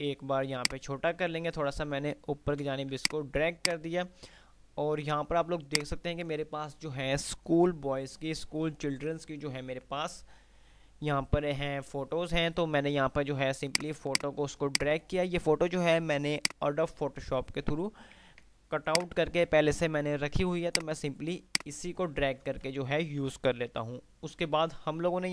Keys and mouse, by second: 3.2-5.6 drag, 5.4 F2, 13.7-15.4 drag, 19.6 c, 20.9-22.9 drag, 22.9 F3.